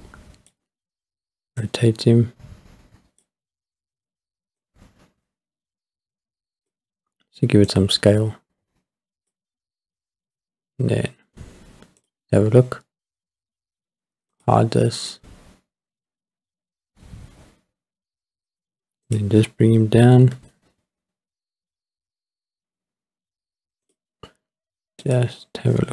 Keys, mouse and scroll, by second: 1.6 click, 4.6 click, 7.7 click, 7.9 click, 10.0-10.7 scroll up 1, 10.8 middle click, 10.8 scroll down 1, 12.3 click, 14.3 click, 16.5 scroll up 3, 17.4 scroll up 2, 19.0 click, 20.1 g, 23.8 click, 25.1 click.